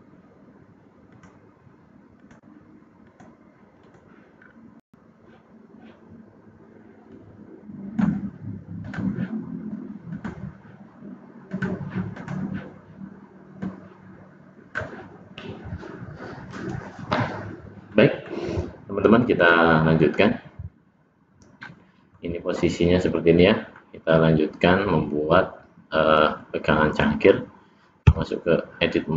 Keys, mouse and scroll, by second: 12.1 click, 17.8 middle click, 19.3 click, 21.0-21.5 scroll up 1, 21.5 scroll down 1, 21.6 middle click, 22.5 middle click.